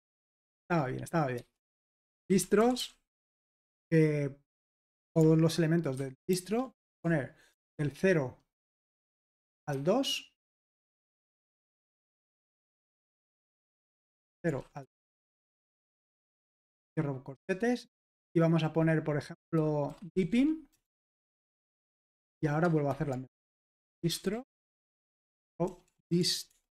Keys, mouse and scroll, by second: 0.0-3.5 typing, 6.1-9.7 typing, 10.8-12.4 typing, 13.5-16.7 typing, 18.1 space, 19.7-26.7 typing.